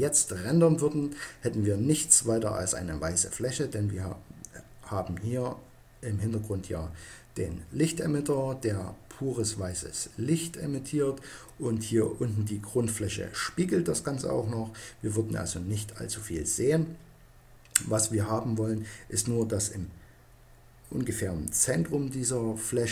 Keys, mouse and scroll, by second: 15.1-22.1 middle drag.